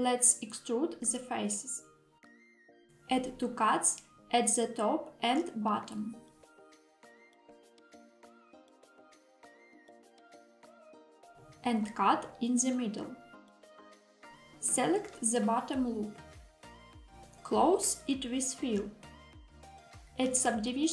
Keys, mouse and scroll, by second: 2.0 click, 3.0 ctrl+r, 7.1 click, 7.6 ctrl+r, 10.2 click, 11.1 ctrl+r, 13.8 click, 14.4 click, 14.6 click, 16.2 middle click, 18.7 f.